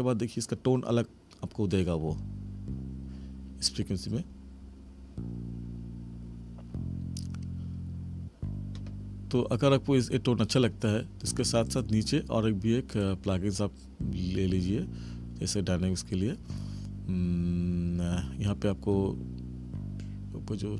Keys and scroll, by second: 2.0 space.